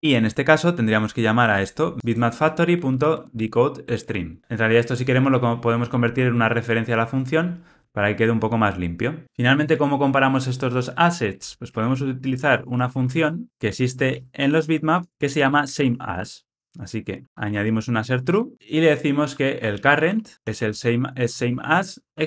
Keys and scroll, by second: 2.7 alt+shift+Left, 5.9 alt+Return, 16.1 alt+Return, 18.2 alt+Return, 20.3 Return.